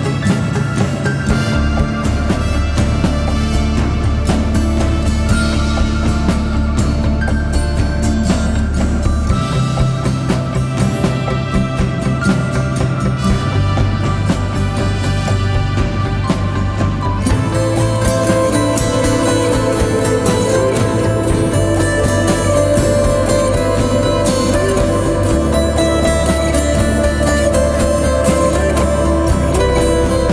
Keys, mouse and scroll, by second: 11.4-13.1 scroll up 1, 18.2 ctrl+t, 23.3 alt+shift+click.